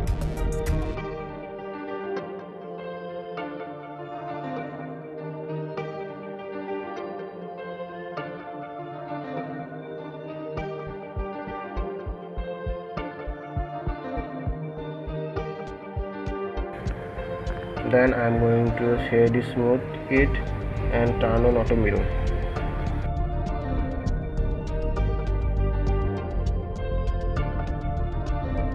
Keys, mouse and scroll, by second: 0.1 e, 4.7 ctrl+z, 6.8 alt+e, 14.5-15.0 scroll down 2, 15.0 middle click, 15.5 click, 15.9-18.6 middle drag, 18.6 Tab, 19.6 Tab, 20.3 right click, 21.0 Tab, 21.6-24.8 right drag, 24.8 click, 25.6 click, 27.5 click.